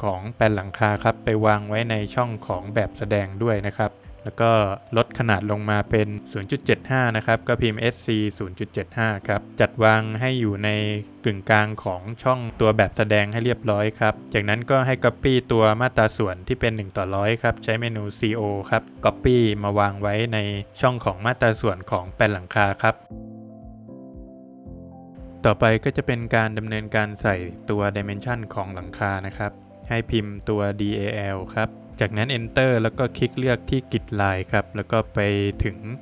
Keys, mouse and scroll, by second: 1.2 click, 1.4 Escape, 1.7 scroll down 2, 2.0 middle click, 3.8-4.1 scroll up 2, 4.0 click, 4.2 double click, 5.0 space, 5.7 click, 7.5 Return, 8.3 Escape, 8.9 click, 9.4 scroll up 1, 9.5 space, 9.6 space, 10.5 Escape, 10.9 click, 11.7 space, 12.2 click, 13.0 Escape, 13.2 scroll down 1, 13.7 middle click, 13.7 scroll down 1, 14.2 Escape, 14.6 click, 17.5 space, 18.9 click, 18.9 scroll down 1, 18.9 middle click, 19.6 middle click, 20.0 scroll up 2, 21.3 scroll up 1, 21.4 click, 21.8 Escape, 22.2-22.6 scroll down 3, 22.6 middle click, 23.0 scroll up 3, 23.5 middle click, 24.1-24.5 scroll up 3, 24.9 middle click, 25.3 Escape, 27.3 Escape, 29.8 space, 31.3 space.